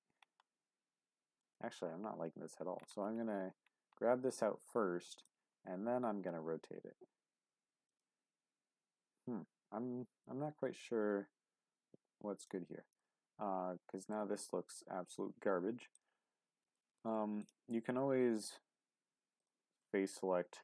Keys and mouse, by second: 1.4 click, 1.9 g, 5.2 click, 5.5 r, 7.9 click, 10.5 r, 12.4 click, 12.9 click, 13.5 middle click, 15.9 click, 16.8 shift+click, 19.4 click, 19.8 middle click.